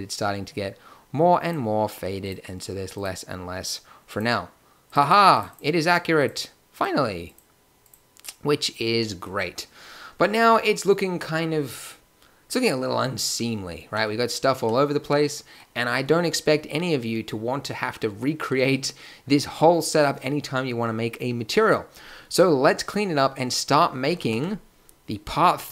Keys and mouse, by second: 0.0-3.0 middle drag, 9.5-9.8 middle drag.